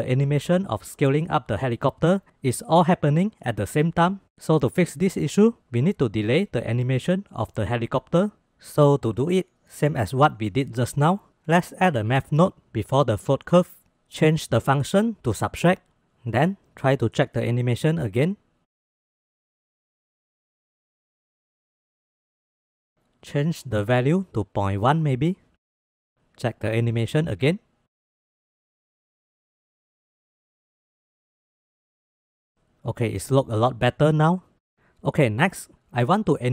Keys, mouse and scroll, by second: 9.2-9.6 drag, 10.1 shift+a, 14.0-15.7 drag, 17.1-18.2 drag, 18.3 space, 19.6 space, 20.2 click, 20.5 space, 23.5-25.7 drag, 26.3 click, 27.1 space, 28.9 space, 31.5-32.2 drag, 32.8 space, 34.7 space.